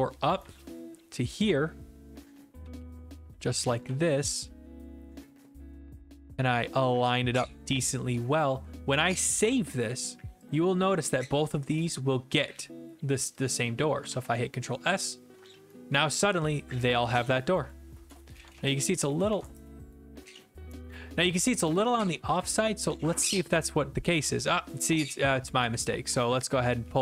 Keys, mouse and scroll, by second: 0.3 click, 0.4-4.3 typing, 2.3 right click, 4.2-5.2 right drag, 8.3-9.4 drag, 10.5-11.5 drag, 13.5 click, 14.1 ctrl+s, 15.0 click, 16.4-17.8 d, 18.1 click, 18.4 alt+Tab, 19.3 alt+Tab, 22.4 click, 22.9-23.6 d, 23.8 s, 24.1 middle click.